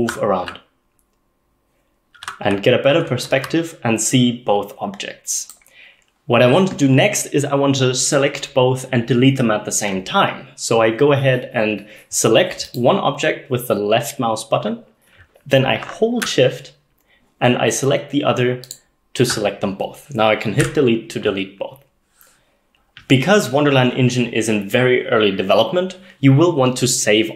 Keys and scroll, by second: 0.0-3.9 typing, 20.6 Delete.